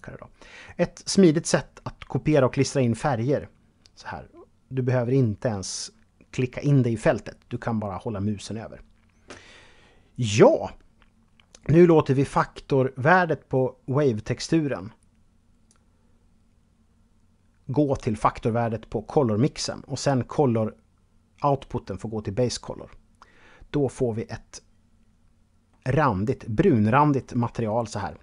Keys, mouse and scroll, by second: 11.5 click, 19.2 click, 22.8-24.7 scroll up 1, 24.7 scroll up 2, 25.2-26.4 middle drag.